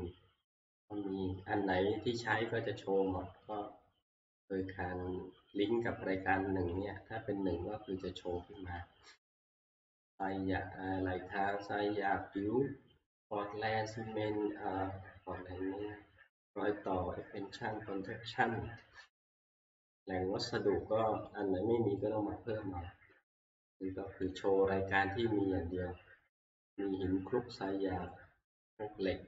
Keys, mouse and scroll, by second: 0.6-1.3 scroll, 3.6 click, 6.8 click, 9.4 click, 9.4 scroll, 11.6 click, 11.6 scroll, 11.8 scroll down 3, 12.2 scroll, 13.1 scroll, 13.9 scroll, 15.5 scroll, 16.3 scroll, 16.9 scroll, 21.4 click, 22.6 scroll, 24.4 click, 28.7 click.